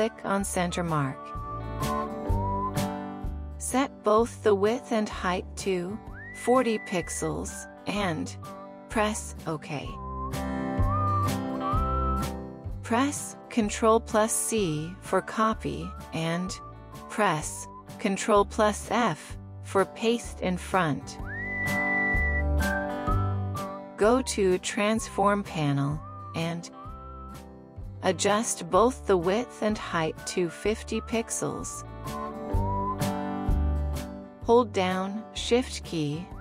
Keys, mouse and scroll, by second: 1.8 alt+click, 5.1-6.1 typing, 6.6 Tab, 7.2-7.8 typing, 8.5 Tab, 9.2 typing, 15.3 typing, 18.1 typing, 18.7 ctrl+f, 26.3-26.7 typing, 28.2 Tab, 28.7-30.4 typing, 31.5 Return.